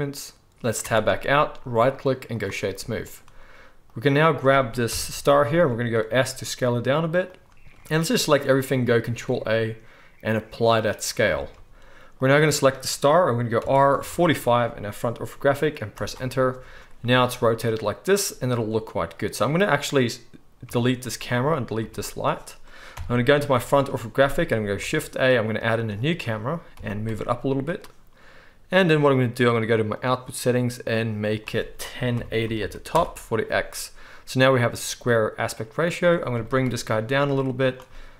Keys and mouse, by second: 0.8 Tab, 1.2-1.8 middle drag, 1.8-3.0 right drag, 3.0 middle click, 3.1-7.2 drag, 4.9 KP_1, 6.1 s, 7.2 right click, 7.4 shift+click, 7.8-12.3 middle drag, 7.8 right click, 8.4 drag, 8.4 right drag, 8.9-11.3 ctrl+drag, 8.9-11.3 ctrl+right drag, 9.0 ctrl+a, 12.1 click, 12.1-21.5 right drag, 13.6 r, 20.6 x, 21.5 middle click, 21.6 right click, 21.8-24.7 drag, 21.8 x, 22.9 KP_1, 24.7 shift+right click, 24.8 shift+click, 24.8 shift+a, 24.9-26.7 right drag, 25.9 click, 26.7 click, 26.7 g, 27.1-27.6 right drag, 27.6-29.8 drag, 29.8 right click, 29.9 middle click, 30.0-31.4 right drag, 31.4-36.1 middle drag, 36.1-37.8 drag, 36.3 g, 37.8-38.1 right drag.